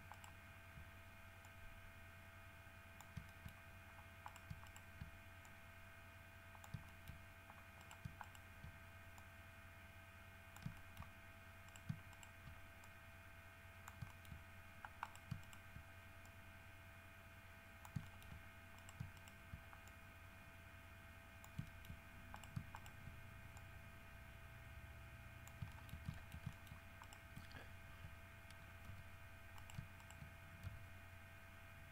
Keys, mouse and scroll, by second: 0.3 shift+right click, 1.7-3.4 drag, 3.5 shift+middle click, 4.5 shift+right click, 4.9 shift+right click, 5.7-7.1 shift+drag, 7.1 shift+middle click, 8.0 shift+right click, 8.5 shift+right click, 9.4-11.0 drag, 11.0 shift+middle click, 11.9 shift+right click, 12.3 shift+right click, 13.1-14.3 shift+drag, 14.3 shift+middle click, 15.3 shift+right click, 15.7 shift+right click, 16.5-18.3 shift+drag, 18.3 shift+middle click, 19.0 shift+right click, 19.4 shift+right click, 20.1-21.9 shift+drag, 21.9 shift+middle click, 22.6 shift+right click, 22.8 shift+middle click, 23.0 shift+right click, 23.8-25.9 drag, 25.9 shift+middle click, 26.5 shift+middle click, 27.2 shift+right click, 29.1 g, 29.8 shift+right click, 30.2 shift+right click, 30.9 shift+g.